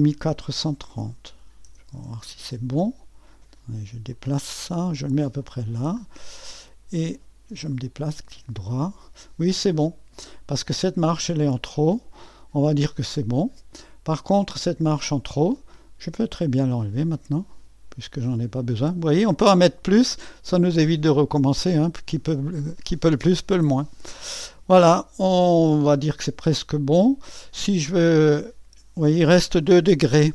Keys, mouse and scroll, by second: 1.0 KP_4, 1.3 KP_3, 1.6 KP_0, 1.9 Return, 4.1-5.7 drag, 5.7-7.7 scroll down 1, 7.7-9.7 drag, 13.3-15.5 scroll up 1, 15.5-17.0 drag, 17.1-20.6 drag, 20.6 Delete, 24.4 click, 26.7-28.2 drag.